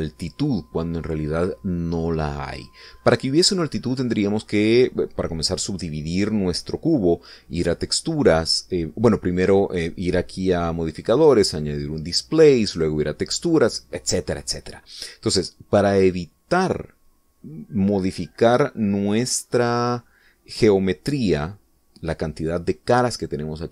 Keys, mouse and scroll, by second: 10.9 click, 12.6 click, 14.3 click.